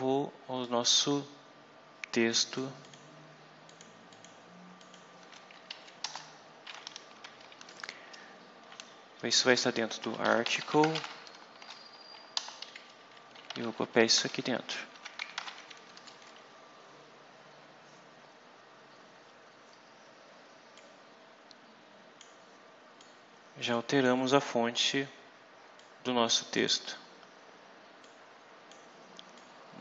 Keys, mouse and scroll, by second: 0.5-2.6 drag, 2.7 click, 3.6 click, 4.0 click, 4.7 click, 5.6 Up, 5.9 Return, 9.6-11.8 typing, 12.2 shift+Return, 12.7 shift+Down, 13.2 shift+Home, 13.5 shift+End, 14.0 ctrl+shift+x, 14.2 ctrl+shift+Up, 14.8 ctrl+shift+Tab, 15.3 ctrl+shift+v, 15.9 Down, 20.6-22.3 drag, 22.9 click, 23.8 click, 24.3-24.7 scroll up 2, 25.6-26.7 drag, 27.9 click, 29.2 click.